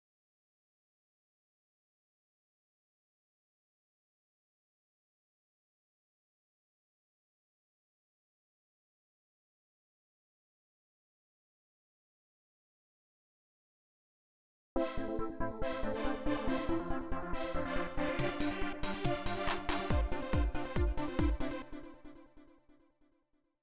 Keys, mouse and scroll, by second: 0.0 right click, 0.9 click, 1.5 right click, 2.5 click, 3.0 right click, 4.2 click, 8.0 click, 9.9-11.7 drag, 12.1-13.0 drag, 13.5-14.5 drag, 14.5 space, 16.3-19.8 drag, 20.6-22.1 drag, 22.9-23.6 drag.